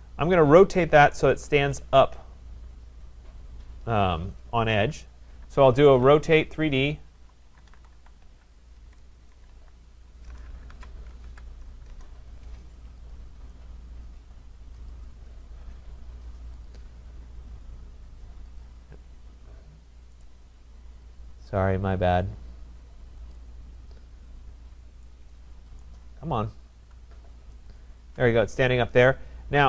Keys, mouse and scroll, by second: 0.8 middle click, 1.0 middle click, 1.1 middle click, 1.1 middle click, 1.4-1.7 scroll, 2.2 scroll, 5.9 r, 6.9-10.0 typing, 11.9 Return, 13.1 click, 14.9 click, 15.6 Down, 16.7 click, 20.2 right click, 21.1 click, 22.1 click, 23.3 click, 25.8 right click, 26.1 middle click, 26.2 middle click, 26.6 middle click, 26.6 middle click, 27.3-27.6 scroll down 3, 27.8 shift+click.